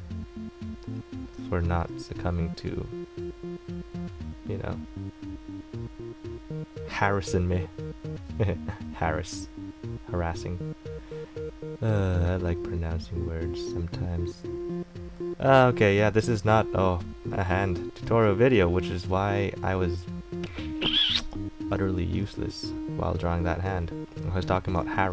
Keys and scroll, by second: 18.0 ctrl+z.